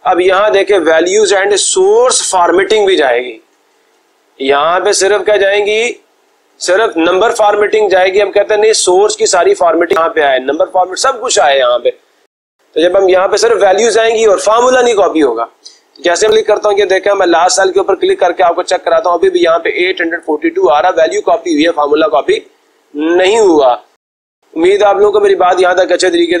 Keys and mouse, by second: 15.7 click, 17.4 click, 26.1 ctrl+z.